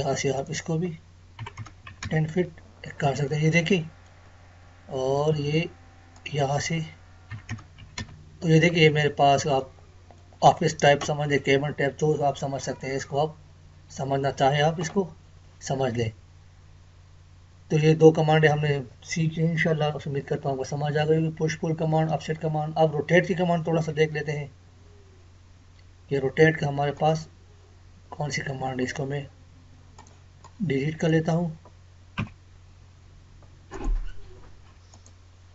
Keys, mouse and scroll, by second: 0.4 click, 2.6-3.3 scroll down 1, 3.3 middle click, 4.2 scroll down 1, 5.4 scroll up 1, 6.1 click, 8.6-8.9 scroll down 1, 9.5-13.4 middle drag, 13.4 scroll up 1, 15.7 scroll down 1, 23.2-23.6 scroll down 1, 23.9 Escape, 24.6-24.9 scroll down 1, 28.8 Escape, 29.9-32.1 drag, 32.1 Delete, 33.7 click.